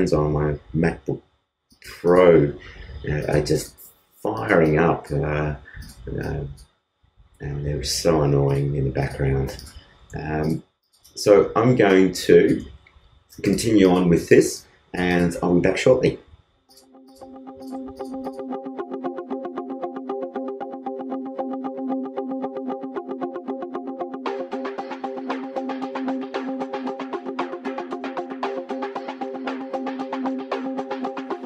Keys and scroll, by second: 10.3 alt+space, 11.6 alt+space, 19.4 alt+space, 30.7 alt+space.